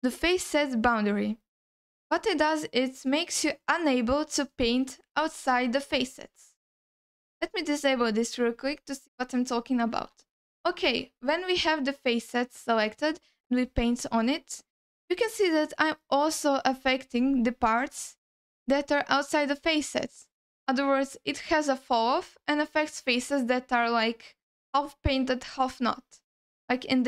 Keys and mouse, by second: 5.2 alt+middle click, 7.2-8.5 drag, 9.1 alt+middle click, 9.5 ctrl+alt+middle click, 10.2 alt+shift+middle click, 10.8 ctrl+middle click, 13.1-17.2 drag, 26.2-27.0 drag.